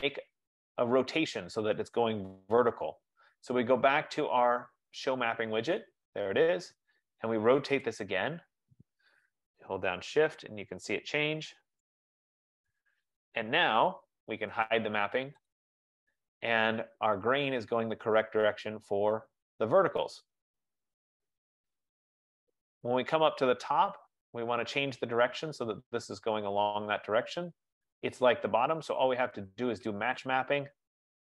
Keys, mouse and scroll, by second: 4.8 F15, 5.4 click, 12.2 shift+click, 15.7 click, 17.0-18.4 scroll, 21.1-22.8 scroll, 23.9-24.5 scroll, 24.9 click, 27.5-27.8 scroll, 30.4 click.